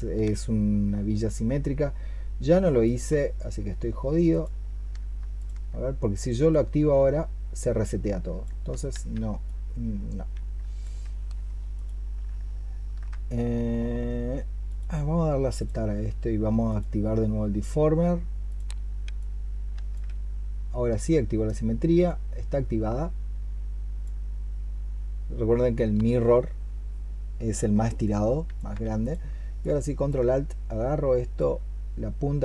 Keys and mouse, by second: 4.1 ctrl+click, 5.0 ctrl+click, 8.8 ctrl+z, 10.4 ctrl+z, 11.6 ctrl+click, 28.8 ctrl+click, 29.4 ctrl+alt+click.